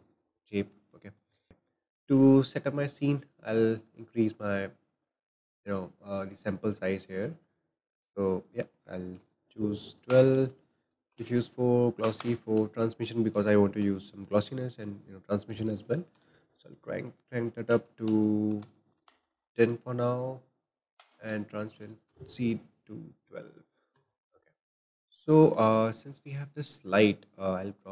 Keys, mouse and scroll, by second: 0.2-0.7 scroll down 3, 0.7 middle click, 0.9-1.3 scroll down 1, 1.3 middle click, 1.5-1.9 scroll up 2, 1.5 ., 3.5 click, 5.7 click, 7.1-12.2 drag, 24.2 click, 24.6-26.7 shift+middle drag, 26.7 click.